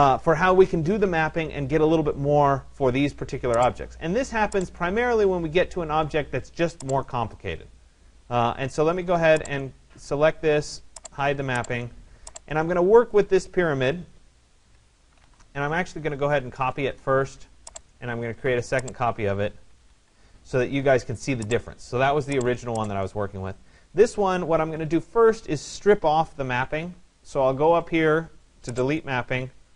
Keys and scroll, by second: 15.9 BackSpace, 16.7 Return, 19.5 Escape.